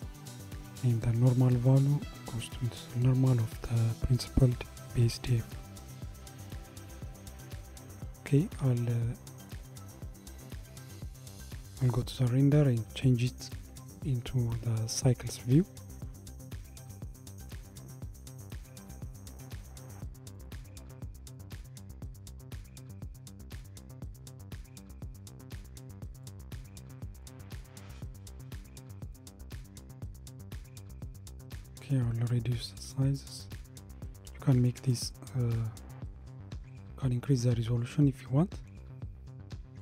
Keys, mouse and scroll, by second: 1.6 click, 17.1 click, 20.4-23.6 drag, 26.2-29.2 drag, 30.0-33.0 drag, 33.2-36.7 drag.